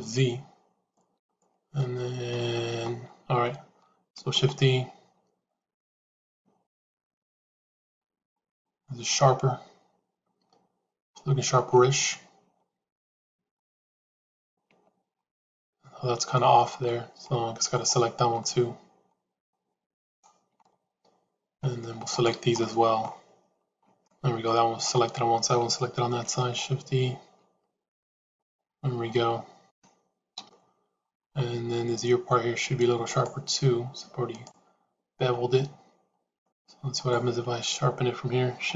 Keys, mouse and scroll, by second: 2.2 middle click, 4.2 shift+e, 7.2 middle click, 8.8-11.0 middle drag, 11.5 Tab, 12.0-14.4 middle drag, 14.6 Tab, 15.5 middle click, 16.8 middle click, 17.6 shift+click, 18.3-19.4 middle drag, 20.0 shift+click, 20.5-21.5 middle drag, 22.4 middle click, 24.0 middle click, 26.0 shift+e, 29.0 middle click, 30.2 KP_3, 33.0 shift+click, 34.2 shift+click, 36.3 click, 36.9 shift+click, 38.6 shift+e.